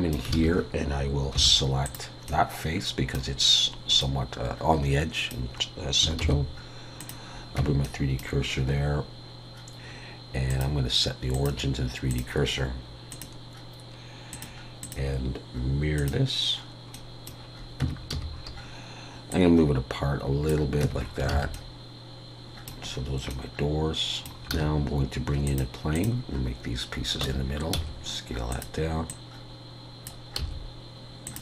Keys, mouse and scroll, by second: 0.3 alt+a, 1.3 3, 1.8 click, 2.3 middle click, 6.2 shift+s, 7.6 Tab, 7.8 middle click, 10.5 click, 16.9 middle click, 17.8 Tab, 18.1 a, 18.4 scroll up 3, 19.3 click, 20.8 Tab, 21.0-21.3 scroll down 5, 21.3 alt+a, 21.5 middle click, 22.9-23.3 scroll down 1, 23.3 middle click, 24.1-24.4 scroll up 3, 24.5 shift+a, 27.2 Tab, 27.7 s, 29.1 click, 30.4 s.